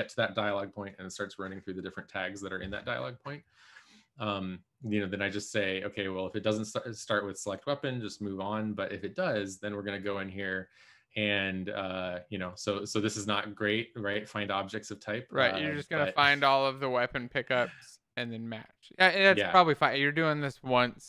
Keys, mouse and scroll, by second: 4.7 click.